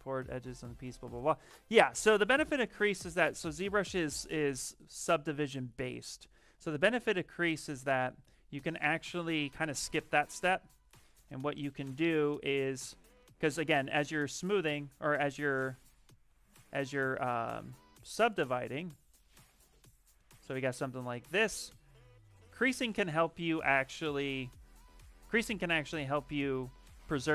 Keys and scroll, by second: 4.4 ctrl+z, 4.5 ctrl+z, 4.7 ctrl+z, 4.8 ctrl+z, 12.8 shift+f, 13.7 shift+f, 15.4 ctrl+z, 15.6 ctrl+z, 15.7 ctrl+z, 16.2 ctrl+z, 16.5 ctrl+z, 17.0 ctrl+z, 17.2 ctrl+z, 17.5 ctrl+z, 17.9 ctrl+z, 18.1 ctrl+z, 18.7 ctrl+z, 19.2 ctrl+z, 19.4 ctrl+z, 20.6 shift+f, 22.5 shift+f, 23.5 ctrl+z, 24.3 ctrl+shift+z, 25.4 ctrl+d.